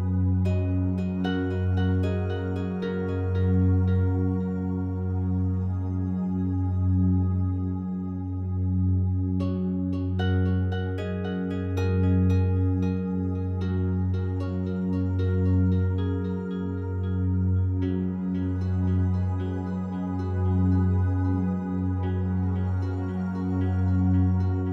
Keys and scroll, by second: 2.8 Escape, 11.7 Escape, 18.0 Escape, 21.2 5, 21.3 Return, 24.6 5.